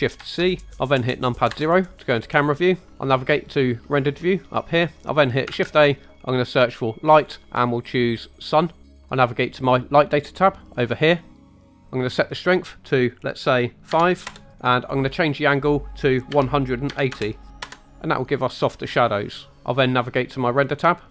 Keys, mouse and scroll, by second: 0.2 shift+c, 1.5 KP_0, 4.0 click, 5.5 shift+a, 10.6-14.4 drag, 15.3-17.7 drag.